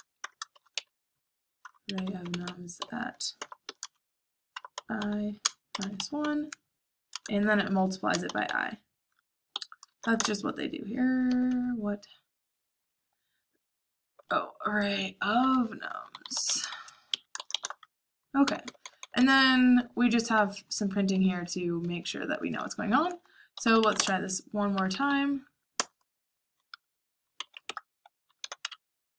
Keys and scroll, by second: 0.0-11.9 typing, 9.5 Escape, 14.0-16.8 typing, 18.1-22.1 typing, 23.4-25.4 typing, 25.7 Return, 27.3-29.1 typing.